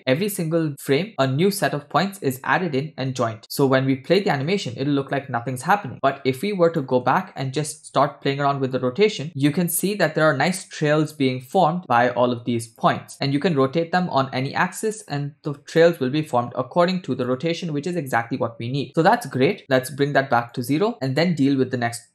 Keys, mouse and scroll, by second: 1.1 click, 4.1 click, 4.5 space, 5.9 space, 6.4-6.9 drag, 7.2-7.6 shift+middle drag, 7.7-8.1 scroll up 1, 8.1 space, 8.7-12.9 drag, 13.4-16.0 drag, 17.4-18.8 drag, 18.8 space, 19.6-20.5 drag, 20.9 scroll down 2, 21.2-22.1 middle drag.